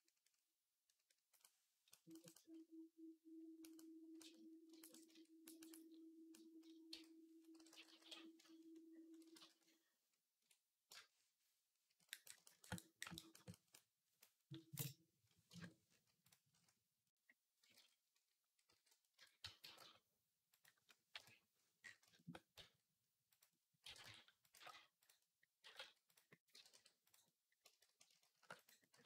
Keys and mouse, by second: 6.8-7.8 typing, 9.2 ctrl+z, 10.7-17.0 shift+drag, 17.0 click, 18.5 alt+g, 19.0 Tab, 19.3 a, 19.5 g, 21.0 KP_1, 21.0 click, 22.4 s, 22.5-27.1 drag, 23.7 g, 24.4 g, 25.5 g, 26.4 g, 28.1 shift+d, 28.9 z.